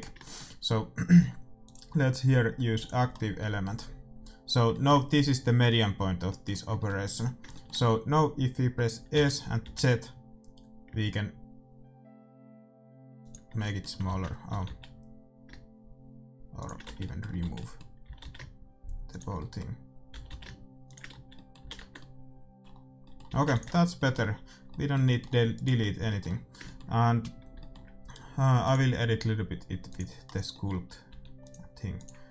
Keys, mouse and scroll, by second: 1.6-3.3 drag, 3.1-9.1 middle drag, 9.1 s, 10.3 middle click, 13.6 middle click, 14.1 ctrl+z, 14.5 s, 17.0 z, 17.6 z, 18.1 s, 20.1 s, 21.1 z, 21.6 z, 21.8 Tab, 23.2 a, 23.6 ctrl+s, 23.6-25.5 drag, 23.6 middle click, 25.5-26.8 right drag, 26.8 click, 26.8-28.6 middle drag, 29.9 click, 30.3-31.9 middle drag, 31.0 f.